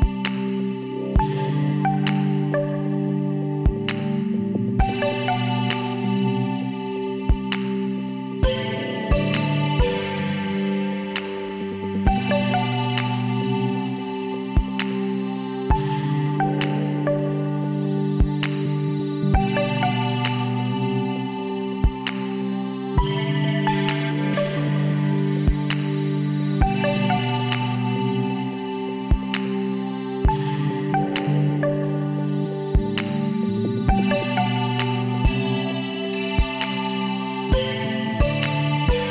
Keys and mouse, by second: 1.6 middle click, 2.1 Tab, 2.7-4.0 drag, 3.5 a, 8.4 middle click, 9.6-11.7 middle drag, 13.1-15.0 drag, 18.5-21.7 middle drag, 23.3-25.7 drag, 25.7-26.8 middle drag, 27.5 middle click, 27.6-29.3 drag, 28.0 Tab, 29.5 a, 31.0 h, 33.3-34.5 drag, 34.1 shift+a, 36.5 s.